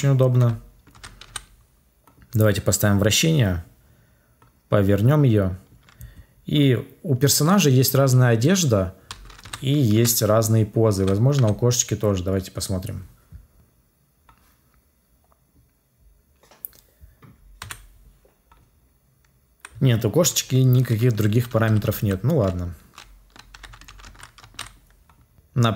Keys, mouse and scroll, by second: 17.5 Delete.